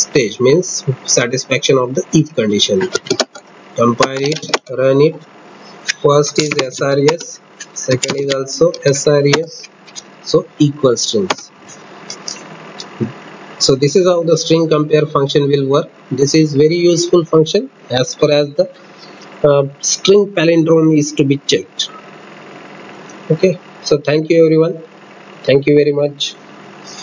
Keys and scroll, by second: 2.5 alt+F8, 5.5 alt+shift+].